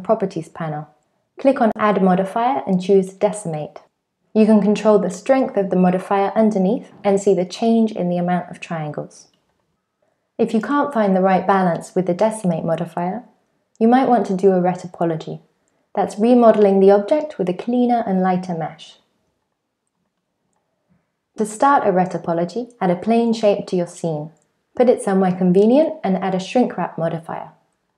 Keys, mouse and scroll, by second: 1.1 click, 5.5 click, 11.3 middle click, 13.2 click, 20.8 shift+middle click, 20.8 scroll down 3, 21.4-25.8 typing, 25.0 shift+middle click, 25.1 scroll up 5, 25.3 shift+middle click, 26.1 click.